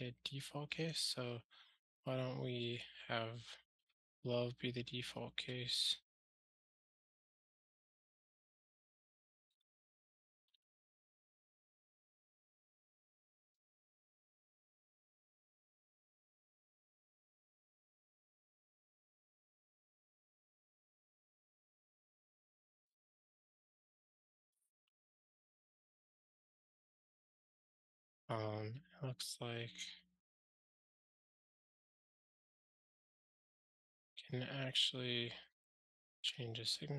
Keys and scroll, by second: 3.8 super+x, 6.9 super+x, 7.0 Tab, 11.9 super+v, 13.9 super+BackSpace, 16.2 ctrl+alt+shift+r, 28.9 alt+Return, 35.5 ctrl+alt+shift+t, 36.3 super+F6.